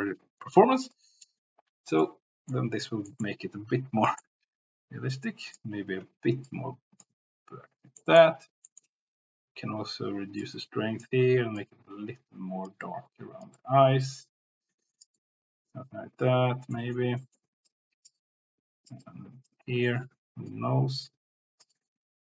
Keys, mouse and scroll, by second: 2.0 middle click, 2.8 middle click, 3.2 middle click, 5.1 click, 6.1 ctrl+z, 6.5 click, 8.0 middle click, 8.6 middle click, 9.0 c, 10.4 click, 11.6-12.7 drag, 12.8 click, 13.5-15.0 drag, 15.2-16.2 drag, 16.7 middle click, 17.2 middle click, 17.6 click, 19.0 click, 19.8 shift+middle click, 20.5-22.3 drag.